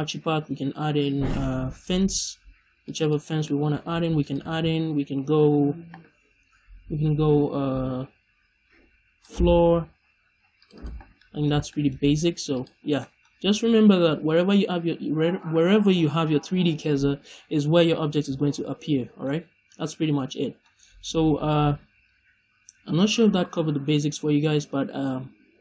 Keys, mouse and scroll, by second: 2.9 click, 3.3 middle click, 3.5-4.0 scroll up 1, 4.4 shift+a, 10.7 click, 11.1-11.6 middle drag, 12.7 scroll down 1, 12.9 middle click, 13.2 scroll up 1, 13.6 middle click, 19.2 middle click, 20.3 scroll down 1, 20.5 middle click.